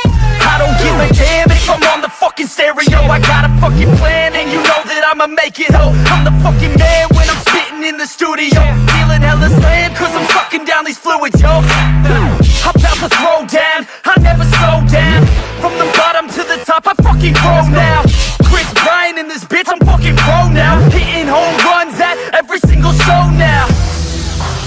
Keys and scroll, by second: 3.2 ctrl+d, 6.1 ctrl+d, 8.1 ctrl+d, 11.4 ctrl+i, 14.0 ctrl+d, 15.6 ctrl+d, 18.7 ctrl+d, 21.4 ctrl+d.